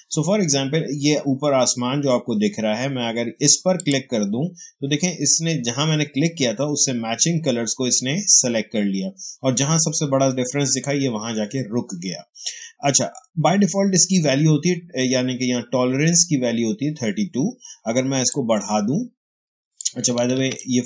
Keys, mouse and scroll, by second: 3.7 click, 5.2 click, 18.2 click, 18.5-20.3 drag, 20.2 ctrl+z.